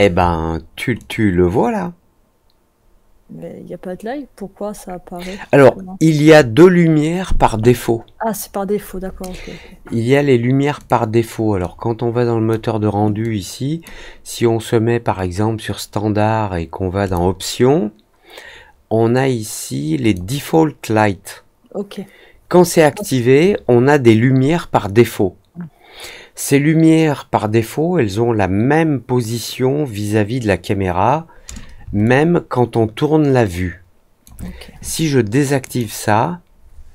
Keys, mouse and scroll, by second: 0.9 click, 9.2 scroll down 1, 10.7 click, 11.5-12.4 drag, 13.2-13.8 drag, 17.0 click, 20.0 click, 32.0-34.2 alt+drag, 35.6 click.